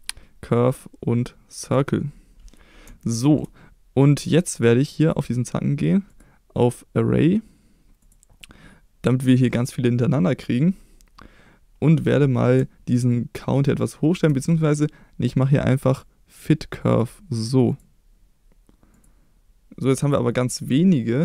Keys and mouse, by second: 3.0-3.3 shift+middle drag, 4.9 click, 6.1-8.1 drag, 13.1-14.2 shift+drag, 15.6-17.0 drag, 17.6 click.